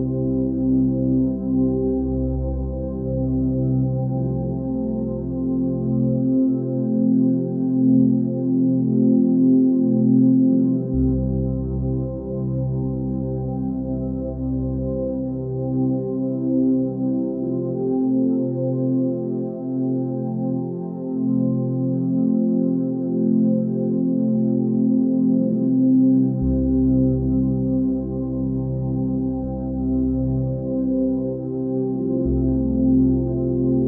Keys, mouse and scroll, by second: 0.0 ctrl+space, 3.2 click, 5.4 scroll up 1, 6.3 scroll down 1, 7.2 click, 9.6 space, 9.6 right click, 10.1 click, 10.3 ctrl+click, 10.5 ctrl+space, 10.9 ctrl+click, 11.0-11.5 ctrl+space, 13.0-14.7 drag, 17.5 ctrl+alt+z, 17.9 click, 20.9 click, 26.0 ctrl+alt+z, 29.2 click.